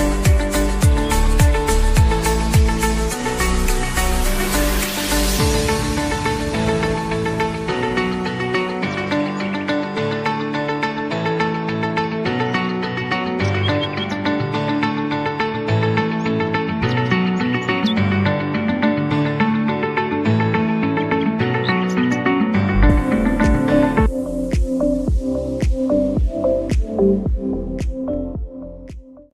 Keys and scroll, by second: 5.5 ctrl+a, 6.3 ctrl+c, 6.8 ctrl+Tab, 8.4 ctrl+v, 10.5-11.5 typing, 13.2-14.4 typing, 14.7 Tab, 18.6 F9.